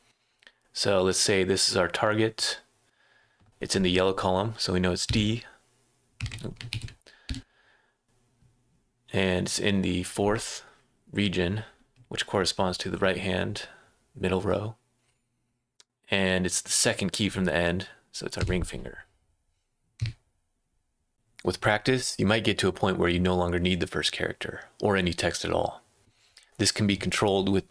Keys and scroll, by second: 5.0 d, 6.2 BackSpace, 6.7 F5, 7.3 d, 18.4 l, 20.0-21.6 typing.